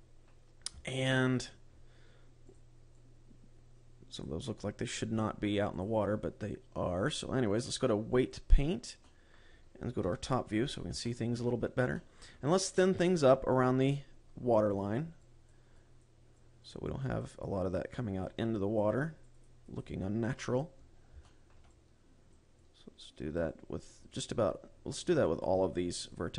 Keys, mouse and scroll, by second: 0.2 middle click, 1.0 scroll down 3, 1.4 shift+middle click, 1.8 right click, 2.9 click, 3.4 click, 6.2 click, 9.5 middle click, 10.5 KP_7, 11.1-11.4 scroll down 2, 11.5 shift+middle click, 12.0 scroll up 2, 12.4 shift+middle click, 13.4 click, 14.1 shift+middle click, 14.4 click, 15.2 click, 15.8 click, 16.3 click, 17.0 click, 17.6 click, 18.0 click, 18.6 click, 19.2 click, 19.6 click, 20.0 click, 20.2 click, 20.6 click, 21.6 shift+middle click, 22.2 click, 23.2 click, 24.1 click, 24.7 click, 25.8 click.